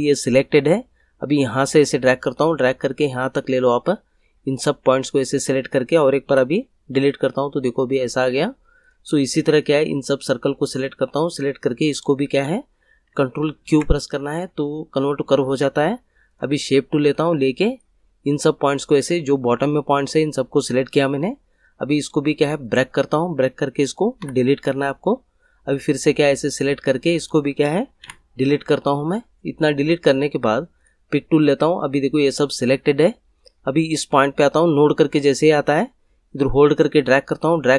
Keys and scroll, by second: 6.2 Delete, 13.6 ctrl+q, 24.2 Delete, 28.0 Delete.